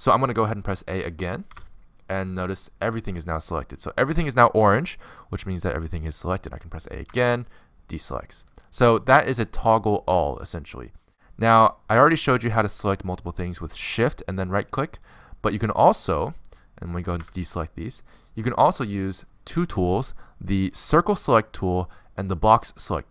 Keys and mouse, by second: 1.7 a, 6.0 middle click, 6.6 click, 7.8 a, 8.0 middle click, 10.5 click, 13.9-19.1 drag, 17.2 a, 21.6 c, 22.6-23.1 drag.